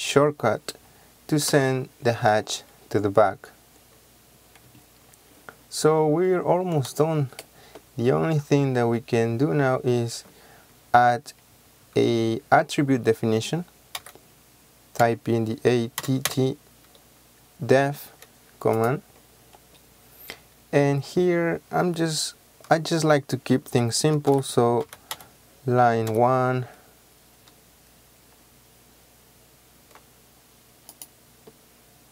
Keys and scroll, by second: 1.5 Return, 14.1 a, 16.1 typing, 24.2-26.2 typing.